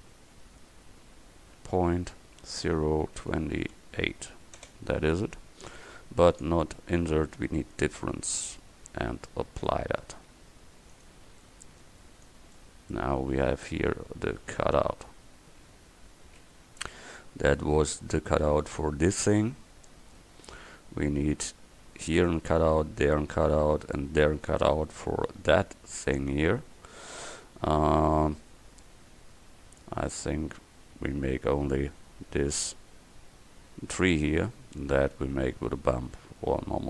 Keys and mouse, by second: 6.3-9.9 drag, 11.0-13.0 middle drag, 13.0 middle click, 13.3-16.6 middle drag, 17.9 KP_1, 19.9-21.9 middle drag.